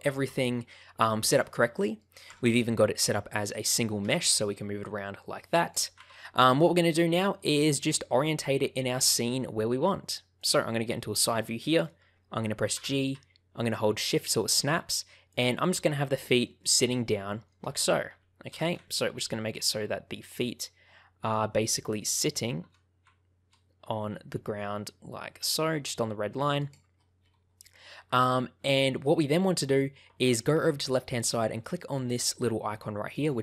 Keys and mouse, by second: 1.5 middle click, 2.2 Tab, 4.0 g, 5.6 click, 6.0 ctrl+z, 6.5 middle click, 11.4 shift+middle click, 12.7 g, 15.2 ctrl+click, 16.3 shift+middle click, 17.3 shift+middle click, 18.4 g, 26.5 click, 28.6 shift+middle click, 33.1 click.